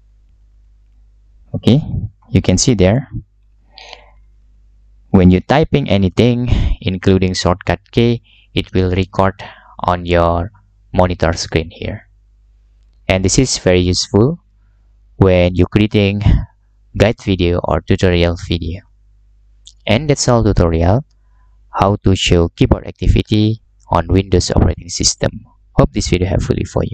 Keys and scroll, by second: 0.0-5.8 typing.